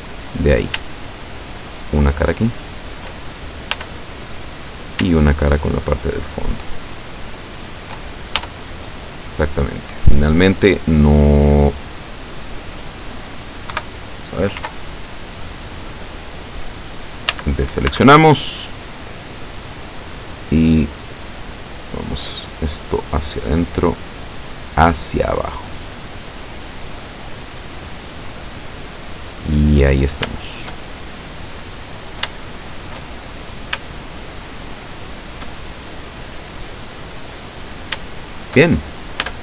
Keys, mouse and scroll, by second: 0.6 right click, 1.3 shift+right click, 2.0 shift+right click, 2.7 shift+right click, 3.9 f, 4.8 right click, 5.5 shift+right click, 6.5 shift+right click, 7.5 shift+right click, 8.5 shift+f, 8.9-12.0 drag, 12.3-13.4 drag, 13.8 KP_7, 17.4 a, 18.0 b, 18.4 click, 19.8-22.8 drag, 23.4-26.1 drag, 26.7-28.2 drag, 28.8-29.5 scroll down 2, 31.1 shift+scroll down 1, 31.9-32.3 scroll up 1, 32.5 shift+click, 33.3-33.9 shift+scroll up 3, 34.1-35.5 shift+middle drag, 35.9-36.5 shift+scroll down 3, 38.1 shift+middle click, 38.8-39.1 shift+scroll up 2, 39.3 Tab.